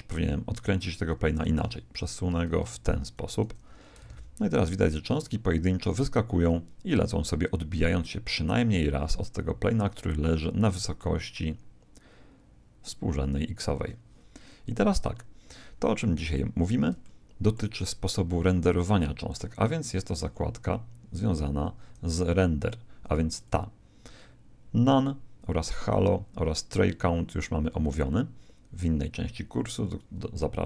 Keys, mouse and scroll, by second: 1.2 Escape, 1.6 r, 4.0 alt+a, 10.4-12.3 middle drag, 14.8 KP_1, 16.6-18.8 middle drag, 20.0-23.4 middle drag, 23.4 click.